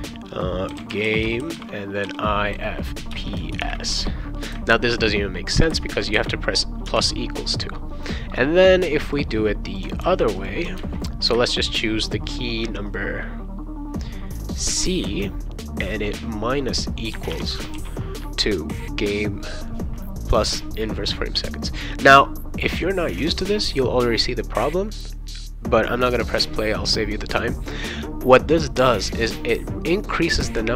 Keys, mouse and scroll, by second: 0.5-4.4 typing, 3.1 Return, 6.9 =, 9.1 click, 10.0 ctrl+c, 10.4 click, 10.8 ctrl+v, 14.3 click, 15.0 shift+c, 16.1 click, 17.1 BackSpace, 17.7 ctrl+s.